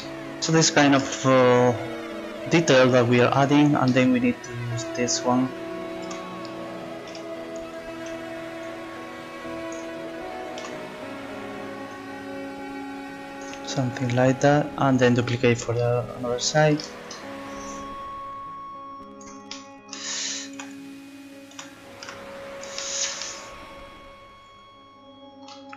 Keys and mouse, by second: 6.0 z, 7.1 a, 8.0 b, 10.6 z, 12.0 middle click, 12.6-13.8 drag, 14.2-15.3 drag, 15.5 click, 17.9-19.2 right drag, 19.6 click, 20.5 z, 21.5 z, 22.1 Tab.